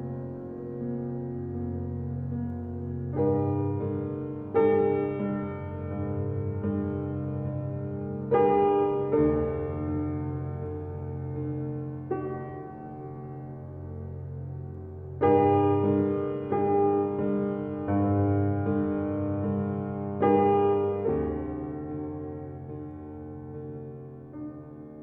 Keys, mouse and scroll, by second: 7.6 scroll down 1, 8.5-9.4 scroll down 1, 9.4-10.2 scroll up 1, 10.2-11.3 scroll down 1, 13.4-14.1 scroll down 1, 14.1-14.8 scroll up 1, 14.8-15.3 scroll down 1, 15.5 scroll up 1, 17.2 click, 21.7 click, 21.7 scroll down 1, 22.6-23.6 scroll up 1, 23.6-24.0 scroll down 1, 24.0 scroll up 1.